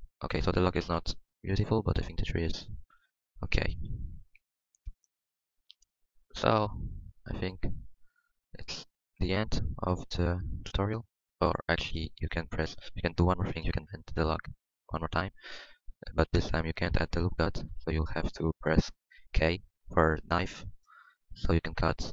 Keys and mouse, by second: 0.7 ctrl+s, 3.4 middle click, 3.8 KP_1, 8.7 Tab, 11.9 ctrl+s, 14.2 Tab, 15.1 Tab, 16.2 z, 16.6 z, 17.3 ctrl+r, 19.8 k.